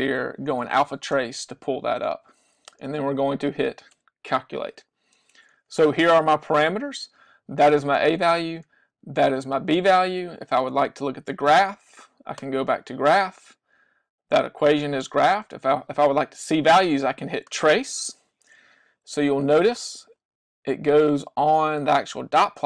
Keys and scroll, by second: 2.1 Down, 4.0 Return, 19.3 Right, 19.9 Right, 20.7 Right, 21.3 Right, 21.8 Right.